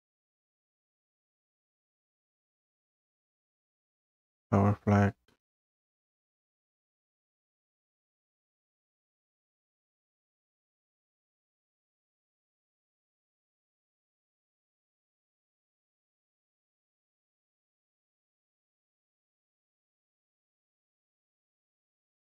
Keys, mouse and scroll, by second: 1.1 click, 2.4 click, 5.7 click, 7.5 scroll down 2, 9.8-10.3 scroll up 2, 12.0 click, 13.6 scroll, 13.7 click, 15.8 click, 18.2 click, 18.9-19.3 scroll, 20.5 scroll, 21.0 scroll up 3.